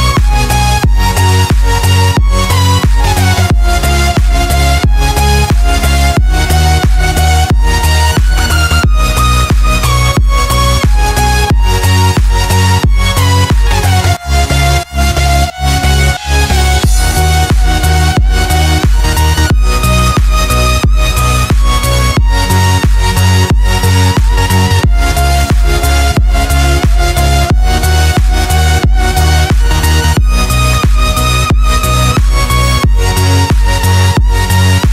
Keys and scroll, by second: 5.8 Tab, 6.3 space, 6.8 space, 6.9 space, 8.4 space, 8.9 super+space, 9.0 super+space, 9.1 super+space, 9.1 super+space, 9.2 super+space, 9.3 super+space, 10.4 space, 10.9 alt+super+space, 11.0 alt+super+space, 11.1 alt+super+space, 11.2 alt+super+space, 11.3 alt+super+space, 11.6 alt+super+space, 13.3 alt+super+space, 13.5 alt+super+space, 13.6 alt+super+space, 15.1-17.0 typing, 20.0 space, 20.5 space, 20.6 space, 26.0 i, 26.8 v.